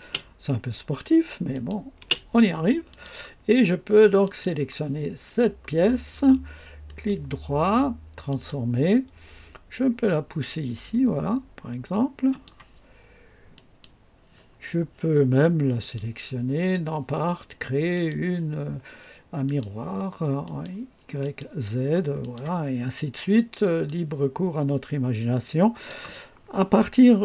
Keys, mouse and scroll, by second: 1.4 click, 1.9 space, 1.9 space, 2.8 click, 4.1 click, 6.8 right click, 8.2 click, 10.0-12.6 drag, 13.4 click, 15.7 click, 17.8 click, 19.4 click, 20.3 click, 21.1 click, 22.1 click, 22.8 scroll down 2, 23.8-26.0 drag.